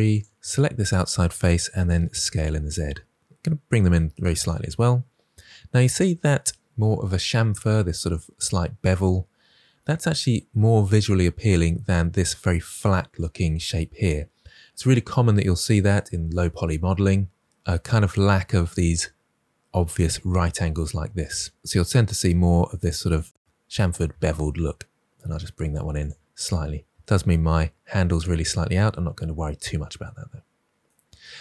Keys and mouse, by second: 1.8 s, 2.2 z, 4.0 s, 21.8 click, 22.3 s, 22.5 z, 23.7 click, 24.1 s, 25.2 shift+z, 26.2 click, 28.4 middle click.